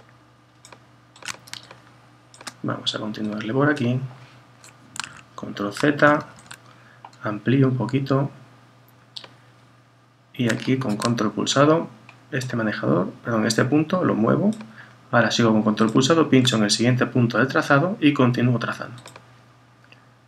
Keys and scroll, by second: 5.1 super+z.